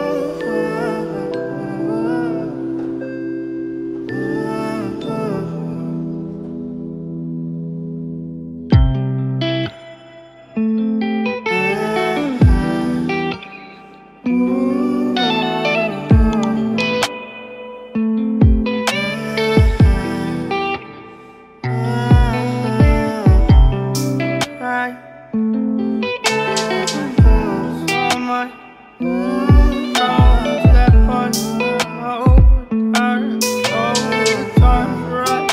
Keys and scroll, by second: 11.2 ctrl+space.